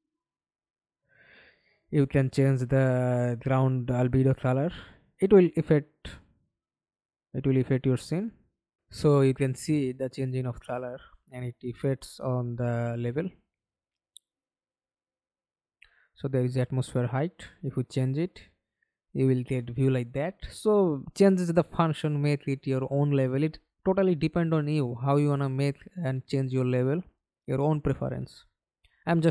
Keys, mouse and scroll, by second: 0.1-1.1 scroll down 2, 7.4 alt+click, 11.8 scroll down 3, 12.0-13.5 scroll up 1, 13.5-16.8 scroll down 2, 23.8 alt+click, 27.8-28.7 scroll down 1, 28.7-29.3 scroll down 2.